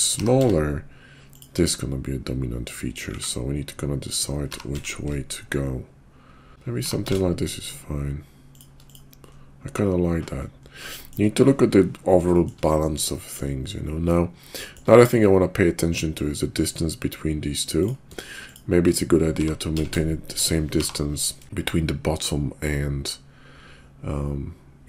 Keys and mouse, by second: 0.1 g, 3.2 s, 4.4 g, 6.5 s, 6.6 g, 8.8 click, 10.9 shift+drag, 12.4 shift+click, 13.0-13.4 shift+drag, 14.7 shift+click, 18.5 shift+click, 19.2 g.